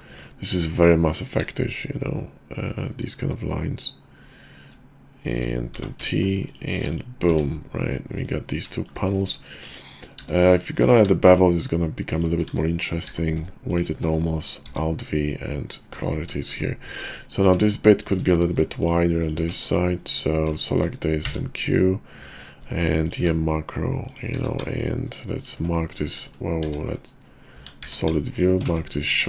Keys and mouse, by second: 0.3-6.6 middle drag, 8.8 shift+click, 10.2 q, 13.1 q, 14.7 alt+v, 17.4 Tab, 17.9 click, 18.5 ctrl+r, 19.4 Tab, 19.7 click, 21.2 q, 25.8 click, 26.6 q, 27.5 Tab, 27.8 q, 28.7 Tab.